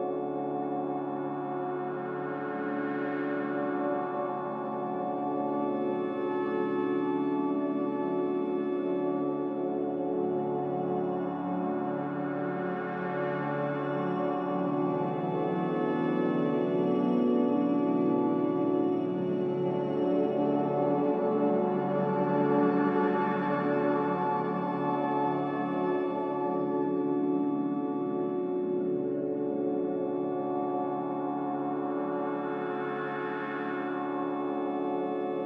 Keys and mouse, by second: 1.4 middle click, 5.2 ctrl+r, 13.1 Tab, 13.8 Tab, 17.7 middle click, 19.5 alt+z, 20.7-21.2 shift+middle drag, 21.5-22.3 drag, 26.7 ctrl+r.